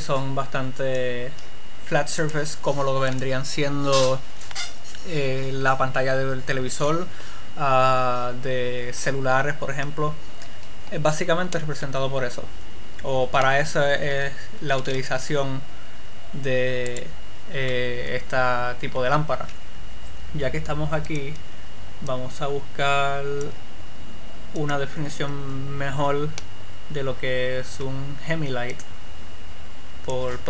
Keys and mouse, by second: 15.1 r, 17.6-19.3 drag.